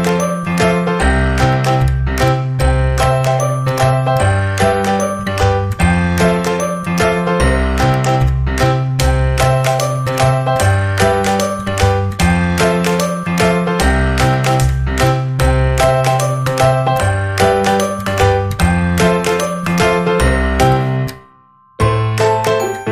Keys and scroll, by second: 13.6 KP_2, 13.9 Return, 22.0 space.